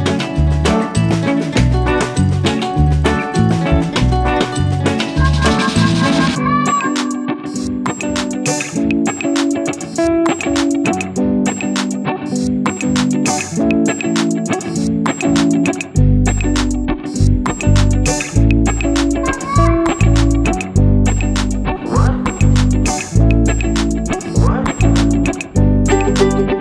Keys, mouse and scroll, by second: 0.1-1.5 middle drag, 1.5 Tab, 2.1 click, 2.9 middle click, 3.7 shift+click, 4.3-5.7 middle drag, 5.7 click, 6.0-6.6 scroll up 1, 6.7 click, 7.0-8.9 scroll up 1, 9.5 Tab, 10.3 s, 13.0 Tab, 14.1 i, 16.5 s, 22.1 s, 25.4 Tab, 26.3 click.